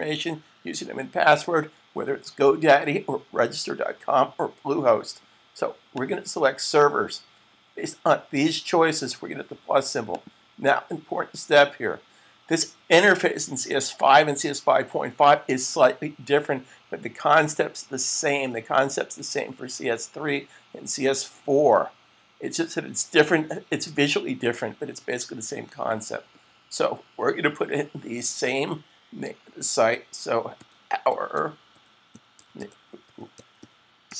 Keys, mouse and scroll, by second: 5.7 click, 9.9 click, 30.1-34.1 typing.